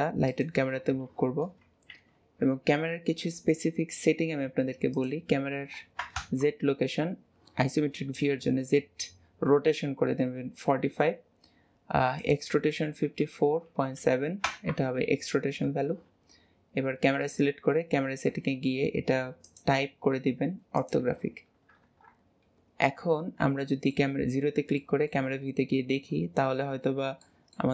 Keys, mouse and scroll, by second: 2.2 ctrl+s, 4.9-8.0 drag, 12.1-15.2 drag, 17.2 click, 19.4-21.8 drag, 21.8 KP_0, 22.5-23.0 scroll down 2, 23.6-24.2 shift+middle drag, 24.2 scroll up 2, 24.7-26.9 shift+middle drag, 26.9 scroll up 1, 27.2-27.7 shift+middle drag.